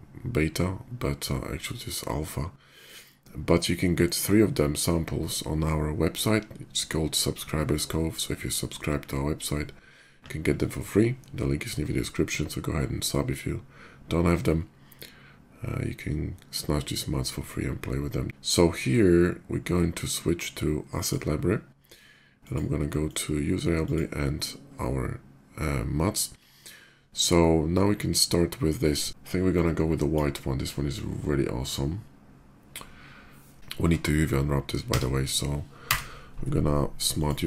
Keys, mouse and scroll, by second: 2.3 click, 20.6 click, 22.0 click, 22.8 click, 23.5 click, 29.2 click, 33.7 Tab, 35.0 a, 35.6 u, 36.7 click.